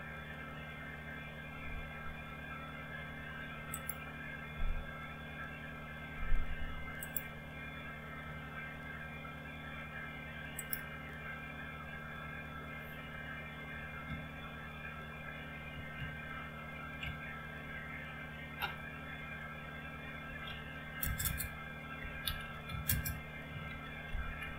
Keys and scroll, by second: 14.8 alt+Tab, 16.1 alt+Tab, 17.0 alt+Tab, 20.4-24.5 typing.